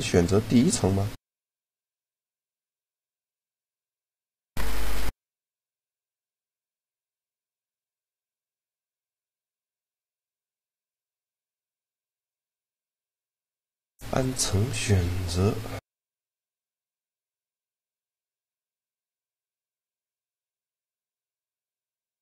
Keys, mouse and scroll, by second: 4.3-7.9 drag, 7.9 a, 9.1 shift+g, 10.3 click, 11.4 shift+click, 14.8 g.